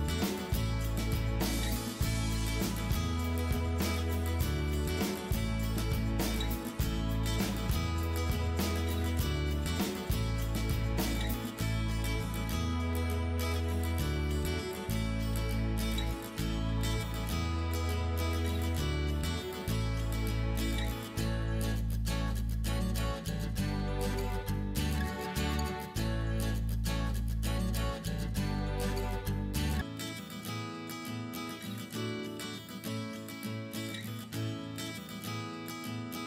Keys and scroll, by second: 25.1 Down.